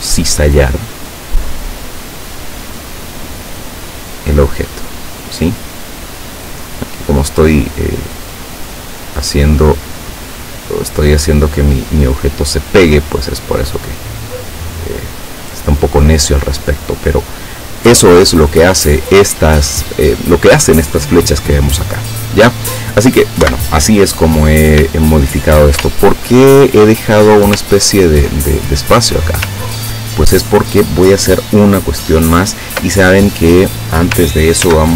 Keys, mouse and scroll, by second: 0.9-5.5 drag, 8.8-13.4 drag, 23.5 Delete, 25.0 shift+click, 26.0-26.9 ctrl+shift+scroll down 4, 27.8 ctrl+scroll down 1, 28.4 ctrl+click, 29.7 ctrl+scroll down 2, 34.7 ctrl+s.